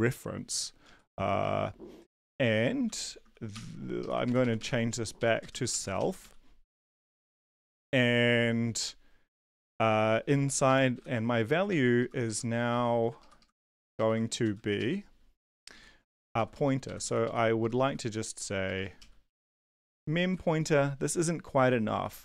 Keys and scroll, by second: 1.3 Down, 2.0 Down, 2.8 End, 3.5 shift+Home, 4.0 Left, 4.2 ctrl+shift+Right, 4.4 ctrl+shift+Right, 4.5 ctrl+shift+Right, 5.2 shift+Right, 5.3-6.5 typing, 10.6 Left, 10.9 ctrl+shift+Right, 11.7 Right, 12.0 Left, 12.7 Right, 12.9 Right, 13.2 ctrl+shift+Left, 13.4 ctrl+shift+Left, 13.6 ctrl+shift+Right, 14.4 ctrl+x, 14.7 Up, 15.6 Return, 15.7 Up, 15.8 Tab, 16.3 Down, 16.5 Down, 16.8 Right, 17.6 Left, 17.6-19.2 typing, 19.8 Tab, 20.2 Right, 20.4 ctrl+s.